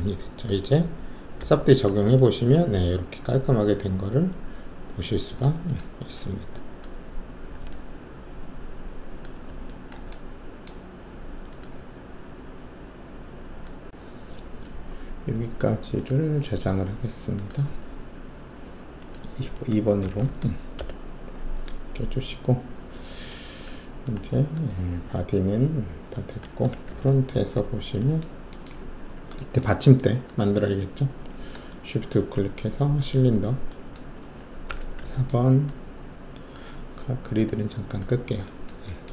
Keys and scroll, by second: 1.5 3, 7.2 alt+1, 20.0 Delete, 20.2 2, 20.8 Return, 26.8 alt+shift+3, 34.6 alt+4.